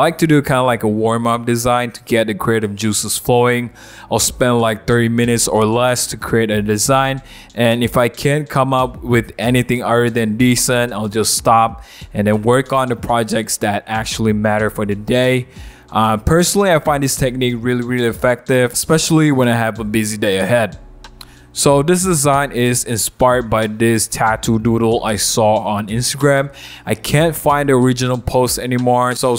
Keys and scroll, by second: 1.1 w, 6.6 super+=, 10.1 l.